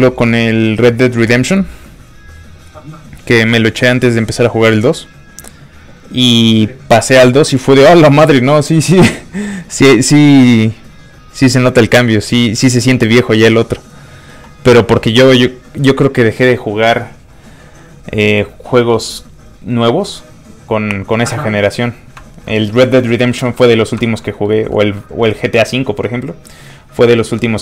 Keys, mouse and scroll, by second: 22.4 middle click, 22.9 scroll up 1, 23.0 middle click, 23.7 scroll up 1, 24.0 shift+middle click, 24.2 middle click, 24.3 middle click.